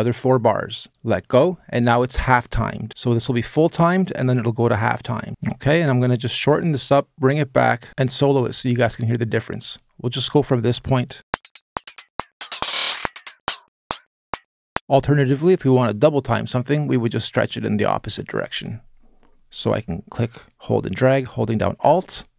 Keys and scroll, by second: 5.3 space, 11.2 space, 14.5 space, 14.9 s, 17.9 super+z, 18.1 super+z.